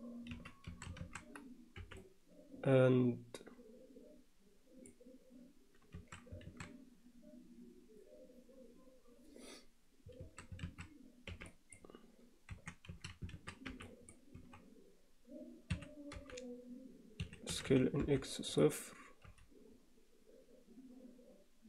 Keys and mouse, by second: 0.3 z, 0.7 a, 1.8 b, 6.0 a, 6.5 alt+a, 10.3 a, 11.3 b, 12.6 1, 12.9 a, 13.7 b, 14.4 x, 16.2 g, 17.5 s, 20.5 g.